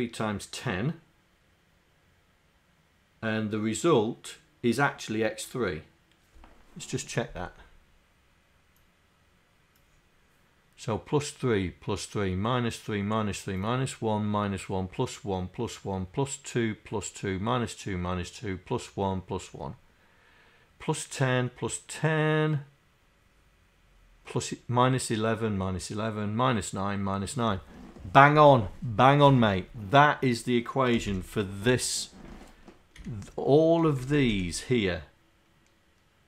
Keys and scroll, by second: 31.0 Home, 33.1 Down, 34.1 Down.